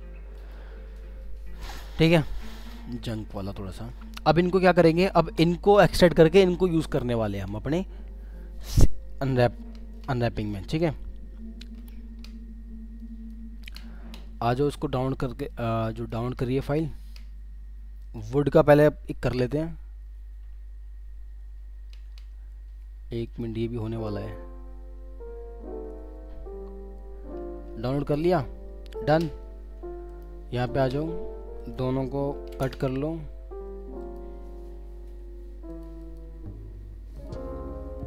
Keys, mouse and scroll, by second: 31.6 ctrl+click, 32.3 ctrl+x, 36.0 double click.